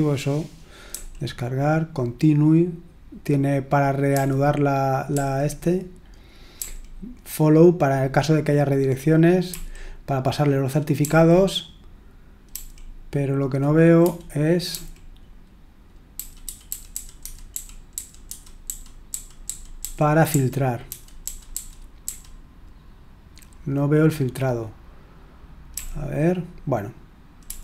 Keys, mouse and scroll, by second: 0.8 typing, 4.1-5.1 typing, 6.5 typing, 9.4 typing, 10.9 typing, 12.4 typing, 13.9-14.7 typing, 16.1-22.0 typing, 25.7 d, 27.4 d.